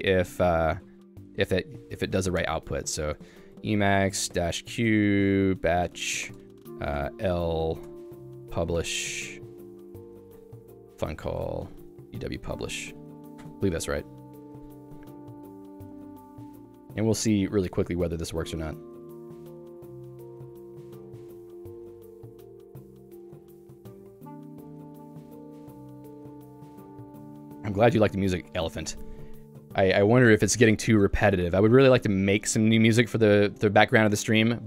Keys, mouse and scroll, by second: 1.6 click, 2.0 a, 3.3-4.9 typing, 8.9 Tab, 9.9 Tab, 10.2-12.2 typing, 13.6 Return.